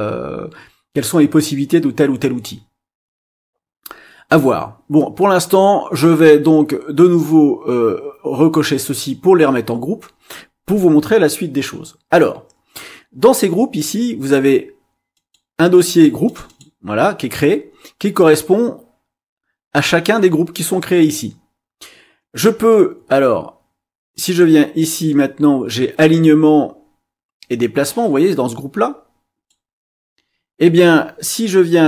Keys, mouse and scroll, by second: 8.6 click, 15.1 click, 16.2 click, 24.2-29.6 drag.